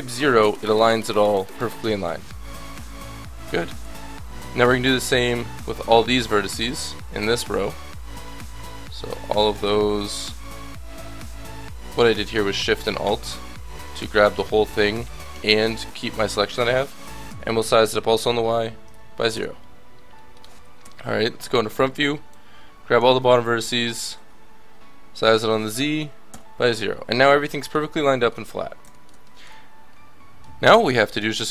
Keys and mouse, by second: 1.2-12.8 drag, 1.7 a, 12.9 middle click, 17.2 s, 19.3 middle click, 20.8 KP_1, 21.7 a, 22.0 b, 23.6-26.3 middle drag, 23.6 s, 26.6 a, 30.7-31.5 drag.